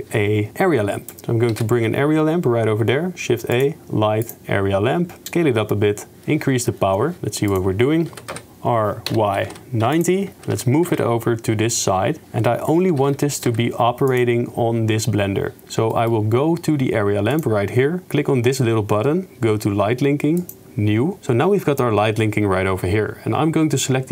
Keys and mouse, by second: 1.5 shift+a, 4.4 click, 4.9 s, 6.2 click, 7.5 click, 8.1 r, 10.4 g, 12.9 g, 16.1-17.3 shift+middle drag, 17.3 click, 17.4 middle click, 20.4 click.